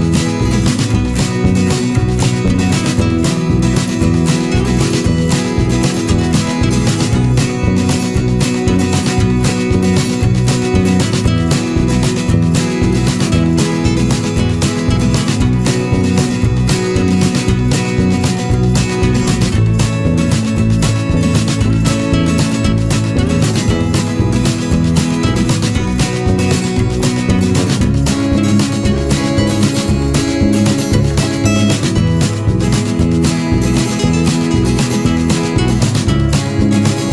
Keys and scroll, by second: 5.7 ctrl+=, 10.0 ctrl+-, 28.2 ctrl+=, 33.4 ctrl+-.